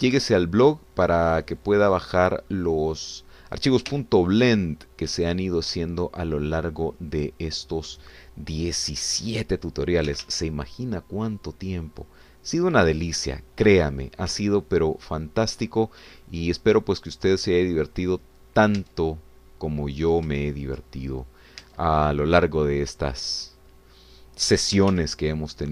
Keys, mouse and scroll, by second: 0.0 shift+middle click, 0.5 shift+click, 1.3-3.4 shift+drag, 3.5 shift+click, 4.9 1, 6.3 click, 8.3 shift+click, 11.1 g, 14.7 click, 15.4 shift+middle click, 17.1-19.3 middle drag, 19.4-19.7 scroll down 2, 19.8 Tab, 20.7-21.0 scroll up 2, 21.4 shift+middle click, 22.0 shift+scroll up 2, 22.6 Tab, 24.4 click.